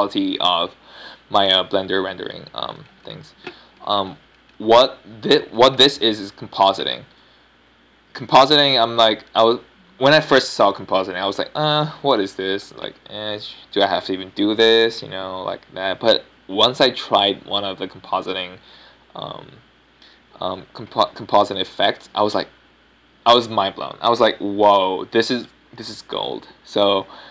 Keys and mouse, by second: 4.3-4.8 middle drag.